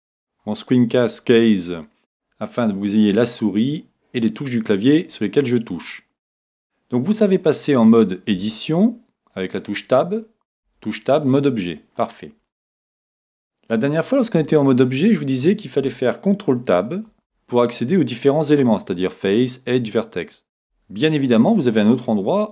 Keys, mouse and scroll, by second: 0.4-2.5 middle drag, 8.3 Tab, 9.3-13.2 middle drag, 10.6 Tab, 14.4 Tab, 17.1 ctrl+Tab.